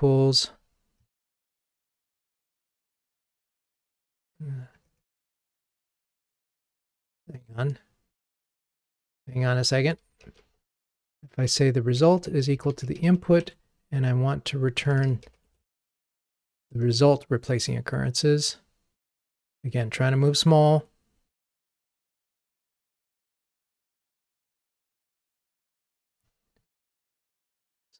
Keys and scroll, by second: 7.0 super+z, 9.2 alt+Up, 10.3 super+/, 13.4 super+/, 14.5 Escape, 16.8 ctrl+r.